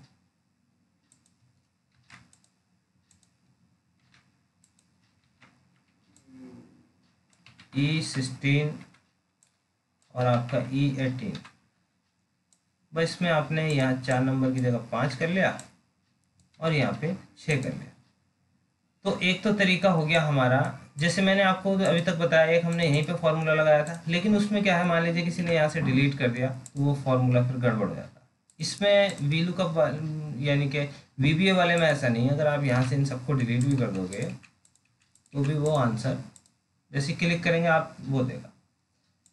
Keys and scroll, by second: 1.9 ctrl+c, 4.0 ctrl+v.